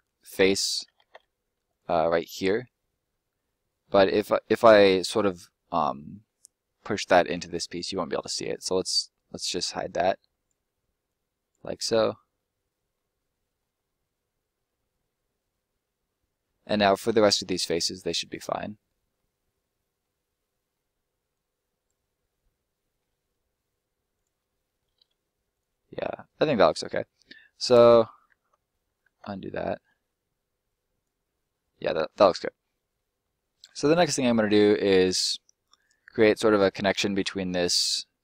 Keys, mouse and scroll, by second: 0.8 ctrl+middle click, 1.7 click, 2.0 right click, 2.4 middle click, 4.9 middle click, 8.1 right click, 8.4 middle click, 9.1 click, 11.7 middle click, 12.2 scroll down 1, 12.3 middle click, 19.4 middle click, 20.1 scroll up 1, 20.3 middle click, 21.3 click, 22.0 middle click, 23.1 e, 24.1 click, 24.9 s, 25.5 click, 25.7 middle click, 27.1 scroll down 1, 27.3 middle click, 27.9 ctrl+middle click, 27.9 ctrl+z, 28.6 middle click, 28.8 ctrl+middle click, 29.0 ctrl+z, 29.6 middle click, 30.6 click, 31.2 middle click, 31.6 scroll down 1, 31.7 middle click, 32.3 scroll up 1, 32.7 middle click, 33.9-34.3 scroll up 2, 34.3 shift+middle click, 34.7 middle click, 37.4 scroll down 1, 37.5 middle click.